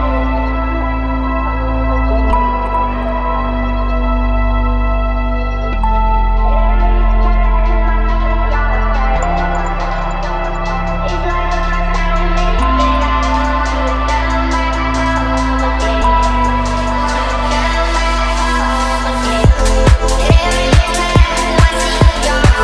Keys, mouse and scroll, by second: 0.3-1.5 drag, 2.8-3.4 drag, 4.2 space, 5.1 click, 7.9-9.6 drag, 11.5-12.0 drag, 13.6-14.3 drag, 15.9-16.7 drag, 18.5 click, 21.3-22.0 drag.